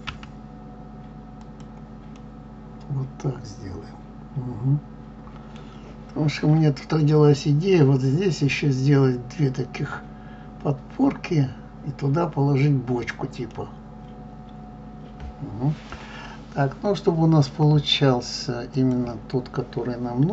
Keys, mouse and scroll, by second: 2.1-5.1 middle drag, 13.5-16.5 middle drag, 18.8 click.